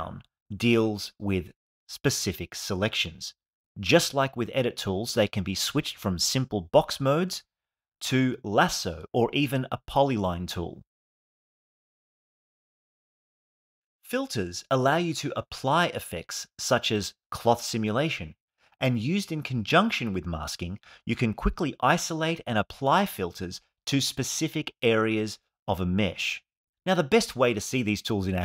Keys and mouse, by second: 0.7-3.1 drag, 4.0-7.2 drag, 8.3-9.6 drag, 10.5 click, 10.9 click, 11.2 click, 11.5 click, 11.9 click, 12.3 click, 17.3 click, 20.0 click, 20.7 click, 22.5 click, 23.8 click, 24.1 click, 25.3 click.